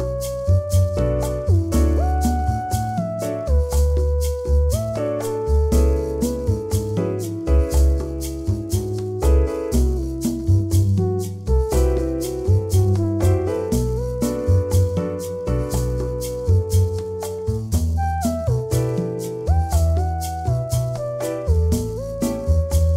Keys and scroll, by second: 14.1 ctrl+v.